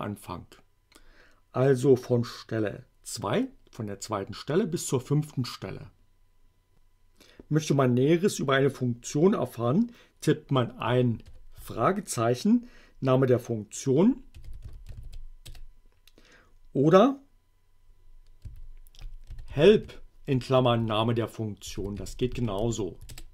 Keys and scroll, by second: 14.2-15.5 typing, 15.5 Return, 18.5-23.2 typing.